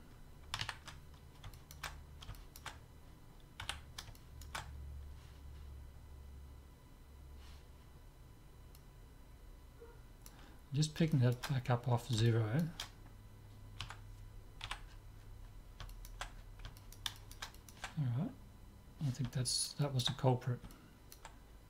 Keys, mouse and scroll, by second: 1.6-6.6 middle drag, 3.6 z, 8.8-10.7 drag, 10.8-13.9 middle drag, 13.9 Tab, 14.8 z, 14.9-19.3 middle drag, 19.4-21.6 middle drag.